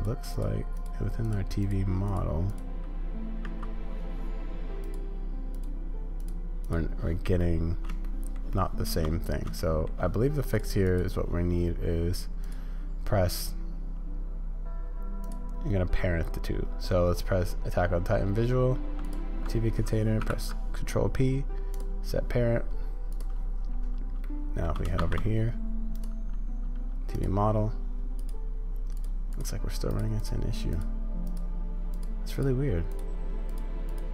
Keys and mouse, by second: 7.4-7.8 middle drag, 8.0-8.4 shift+drag, 8.5-8.8 shift+drag, 9.6 shift+drag, 10.9-12.5 drag, 23.1-24.1 drag, 24.2-24.6 shift+drag, 25.0 shift+a, 31.2 click, 31.9-34.1 drag.